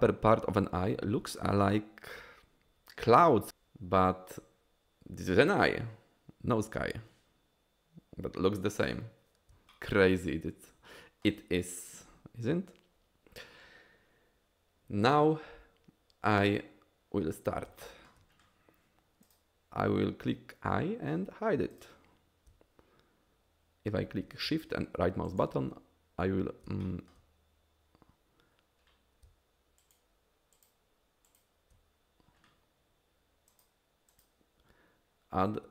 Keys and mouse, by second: 9.8-11.2 shift+middle drag, 17.8 shift+middle drag, 21.7 click, 25.4 shift+right drag, 26.8 shift+middle drag, 29.8 shift+right click, 30.6 shift+right click, 33.6-35.7 drag.